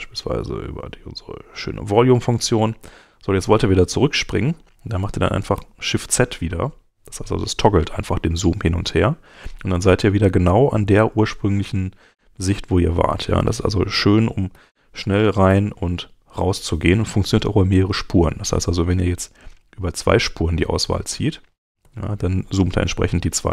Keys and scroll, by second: 4.4 Escape, 5.3 shift+Escape, 5.5 shift+z, 14.5 shift+z, 21.8 shift+z.